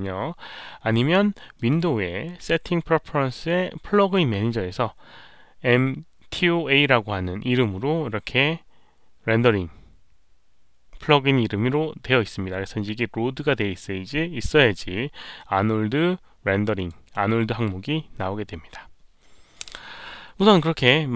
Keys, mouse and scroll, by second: 1.5 click, 3.9 click, 12.4 click, 16.7 click.